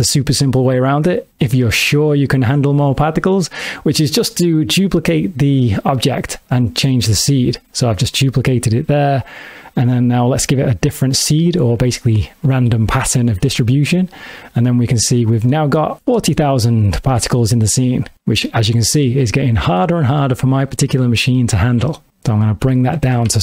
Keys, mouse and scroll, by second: 6.7 shift+d, 9.2 click, 12.1 click, 13.9 g, 15.4 click, 16.5 space, 21.0 x, 22.1 click, 22.2 click.